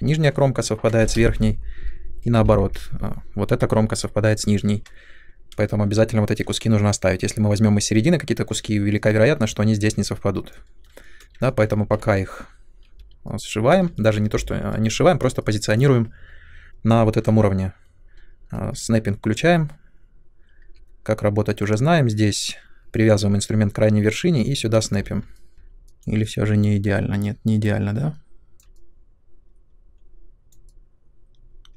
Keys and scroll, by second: 5.4 space, 12.0 w, 17.2 w, 20.6 w, 24.7 space, 25.5 2.